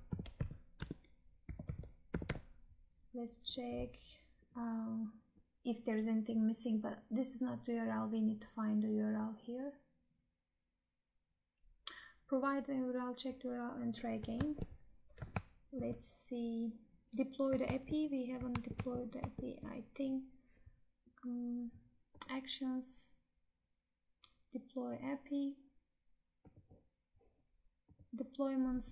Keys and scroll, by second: 14.4 Tab, 15.6 alt+Tab, 17.8 Tab, 18.7 alt+Tab.